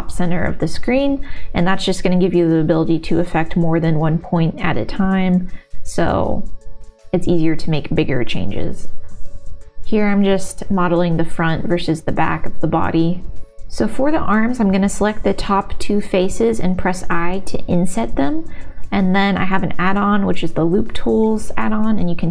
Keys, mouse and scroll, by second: 0.5 click, 4.2 g, 4.3 click, 4.3 g, 5.5 click, 5.5-9.8 typing, 5.9 ctrl+s, 5.9 middle click, 7.0 click, 8.1 click, 9.5 click, 11.7 g, 12.2 ctrl+s, 15.6 3, 17.7 i, 20.5-22.3 middle drag.